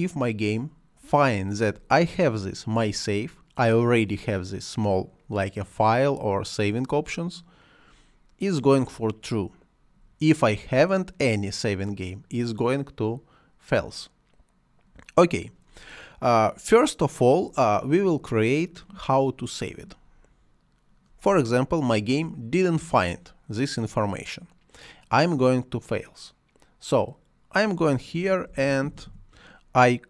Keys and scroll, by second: 28.1-29.4 typing.